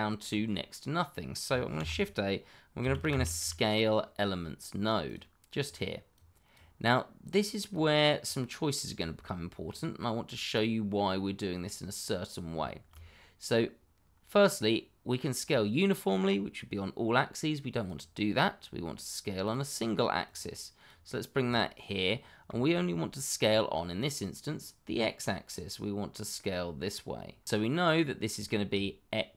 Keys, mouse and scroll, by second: 1.7 shift+a, 2.8 s, 3.0 c, 3.1 a, 3.4 l, 5.0 click, 9.6-9.9 scroll up 1, 9.9 middle click, 11.1-11.6 scroll up 1, 13.1-13.7 scroll down 1, 17.8 click, 21.5 shift+middle click, 21.6 middle click, 21.7 shift+middle click, 23.6 scroll down 1, 23.9 middle click, 27.9-28.3 scroll up 1, 28.4 shift+middle click.